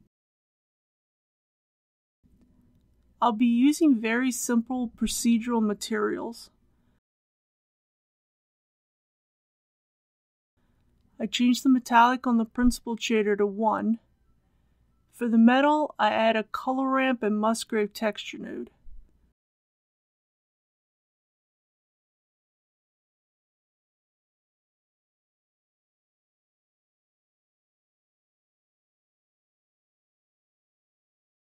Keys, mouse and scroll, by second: 5.8-6.5 typing, 6.9 Return, 8.4 scroll up 1, 9.6 shift+middle click, 11.3 click, 11.8 KP_1, 14.7 shift+a, 17.7 click, 21.2 shift+a, 26.6-30.7 drag.